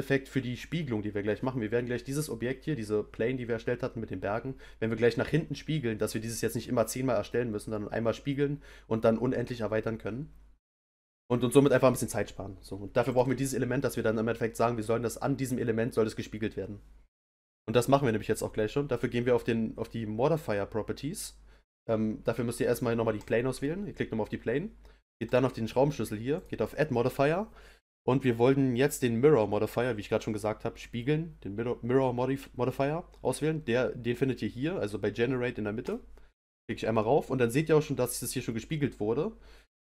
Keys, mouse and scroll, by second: 11.6 click, 13.1 click, 23.2 click, 25.2 click, 26.3-29.3 drag.